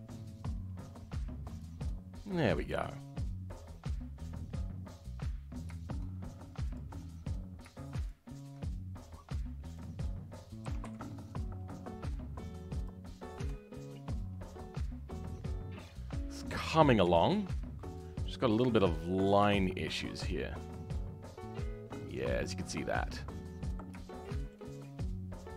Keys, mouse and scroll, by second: 1.9 scroll down 2, 3.7-4.5 scroll down 2, 4.5 click, 6.6 click, 7.1-8.0 scroll up 2, 8.0 shift+click, 13.0 scroll down 2, 13.3 Tab, 13.7-16.7 middle drag, 19.0-19.5 scroll up 3, 19.5-25.5 shift+middle drag.